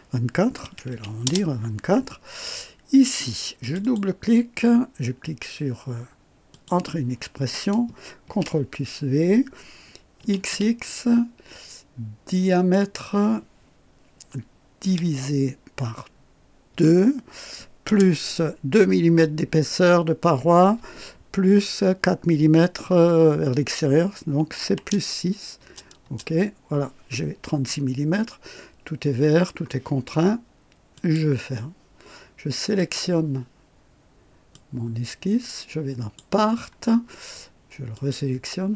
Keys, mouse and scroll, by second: 0.6 KP_2, 0.9 KP_4, 1.2 Return, 3.6 click, 6.5 click, 8.2 ctrl+v, 10.2-11.0 typing, 12.5 click, 14.8 KP_Divide, 14.8 typing, 16.7 typing, 17.8 KP_Add, 17.8 typing, 24.6 KP_6, 25.5 Return, 25.7 KP_Enter, 28.0 scroll up 1, 29.3-29.6 scroll down 1, 30.9 click, 32.8 click, 34.5-36.3 drag, 37.9 click.